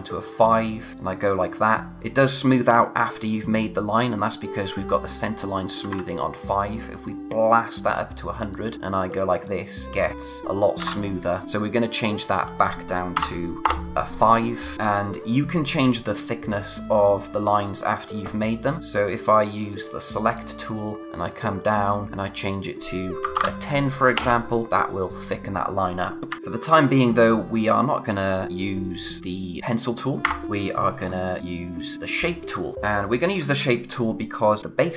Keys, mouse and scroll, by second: 2.0 z, 2.1 click, 5.8 ctrl+Num_Lock, 5.8 z, 6.6 click, 10.8 z, 11.4 click, 13.6 Return, 19.6 click, 21.3 click, 24.7 click, 26.3 ctrl+z, 26.4-26.8 scroll up 1, 26.8 click, 31.8 click, 32.1-32.7 scroll down 1, 32.7 space.